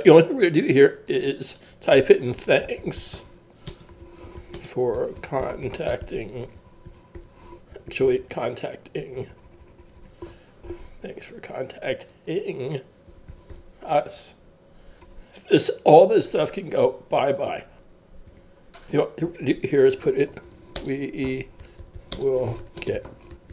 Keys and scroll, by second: 2.1-7.7 typing, 9.2 g, 13.1-15.7 typing, 20.1-23.5 typing.